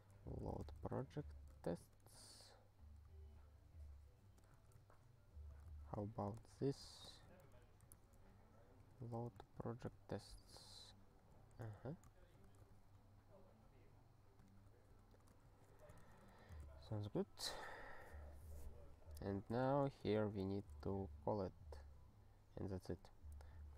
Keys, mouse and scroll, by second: 0.0-2.5 typing, 4.2-5.0 typing, 5.8 ctrl+s, 6.3 ctrl+e, 6.8 Return, 6.9-9.6 typing, 10.2 ctrl+p, 10.6 ctrl+s, 10.9 ctrl+p, 11.3 ctrl+n, 11.7 alt+b, 12.4 Return, 12.7 ctrl+s, 14.5 ctrl+p, 14.6 ctrl+p, 14.9 ctrl+b, 15.1 ctrl+b, 15.5 *, 16.0 ctrl+alt+@, 16.2 Tab, 16.7 ctrl+s, 17.7-18.1 scroll down 1, 19.3 click, 19.4 click, 19.7 ctrl+n, 20.1 ctrl+k, 20.5 ctrl+s, 23.3 scroll down 1, 23.6-23.7 scroll.